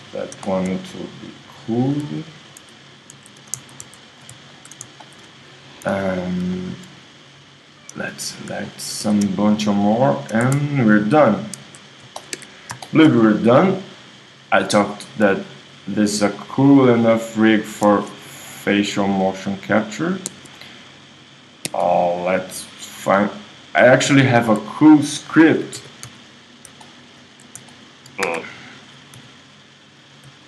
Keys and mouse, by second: 2.7 super+z, 3.1 super+z, 3.9 shift+z, 5.0 shift+z, 5.8 z, 9.0 z, 10.4 space, 11.8 Tab, 11.8 click, 12.4 KP_1, 14.5-16.6 right drag, 18.5-21.2 right drag, 21.6 right click, 22.6 right click, 24.4 right click, 24.8 middle click, 25.8 g, 26.8-28.0 drag, 28.3 KP_1, 29.2 g.